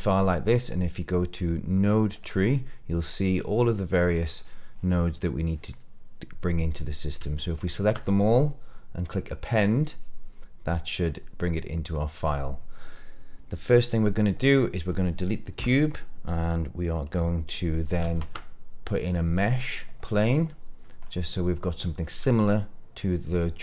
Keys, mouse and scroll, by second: 11.0-12.1 drag, 12.2 click, 12.8 scroll down 1, 12.8-13.9 middle drag, 14.3 click, 15.5 Delete, 17.9 shift+a, 20.4-20.7 middle drag, 20.9 scroll up 2, 21.3-22.0 middle drag.